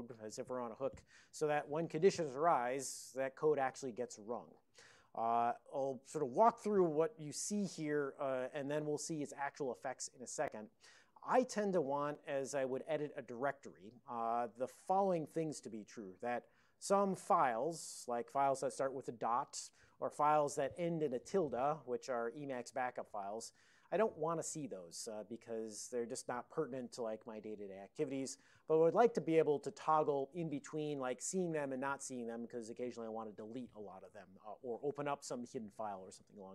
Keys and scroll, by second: 7.8 Down, 7.8 Down, 17.5 Down.